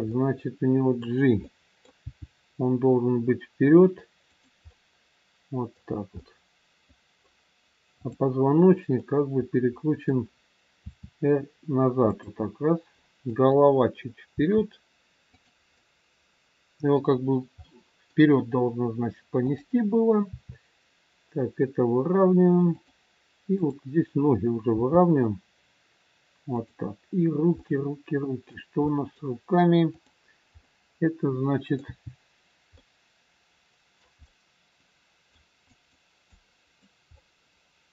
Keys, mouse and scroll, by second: 0.2 middle click, 2.0 middle click, 2.0 g, 4.7 middle click, 8.0 middle click, 8.0 click, 9.0 middle click, 10.7 r, 13.1 click, 14.2 r, 15.7 middle click, 19.4 middle click, 19.4 click, 20.2 r, 23.6 click, 24.7 g, 27.6 middle click, 30.0 middle click, 30.0 click, 30.7 middle click, 31.7 g, 36.2 click, 37.1 middle click.